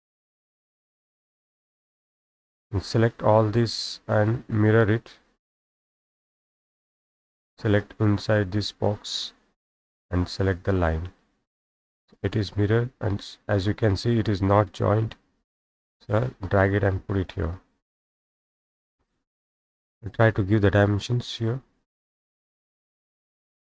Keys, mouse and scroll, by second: 1.0 click, 1.1 Escape, 1.4 Escape, 3.9 click, 5.8 click, 7.0 click, 10.7 click, 12.0 click, 12.5-14.2 scroll up 9, 14.2 middle click, 14.2 scroll, 17.1 click, 17.5 click, 17.6 Escape, 17.7-20.1 middle drag, 17.7-19.5 scroll down 18, 19.5 scroll up 1, 19.7-21.9 scroll, 20.6 middle click, 21.0 middle click, 21.6 middle click, 22.1-23.7 scroll up 8.